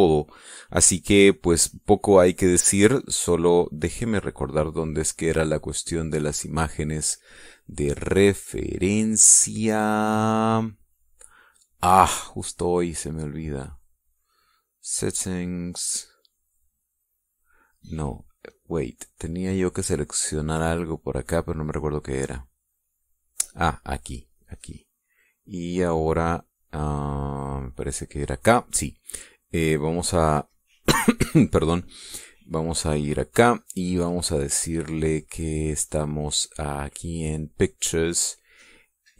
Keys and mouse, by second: 4.8 click, 19.2 click, 24.3 click, 24.7 click, 28.3 click, 33.6 click, 35.5 click, 38.0 click.